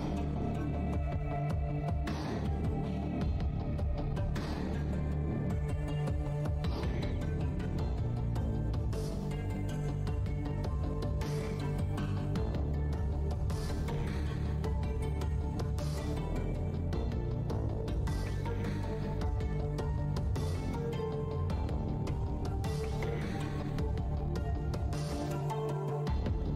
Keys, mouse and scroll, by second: 2.3 alt+click, 6.3 click, 7.1 shift+click, 14.5-15.4 typing, 16.3 click, 17.4 alt+click, 18.4 alt+click, 21.9 e, 22.4 s, 23.0 click.